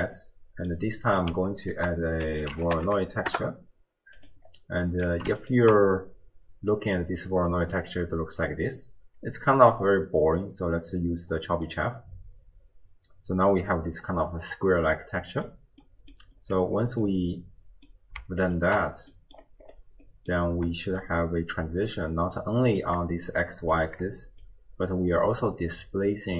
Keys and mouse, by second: 0.0 click, 1.7 ctrl+a, 4.8 click, 5.7 ctrl+shift+click, 6.7-7.8 drag, 9.6-12.0 drag, 15.0-15.6 drag, 15.8 middle click, 16.0 click, 16.1 middle click, 17.1 middle click, 18.7 ctrl+shift+click, 19.2 middle click, 20.1 middle click, 21.0-22.9 shift+drag, 24.4-26.3 shift+drag.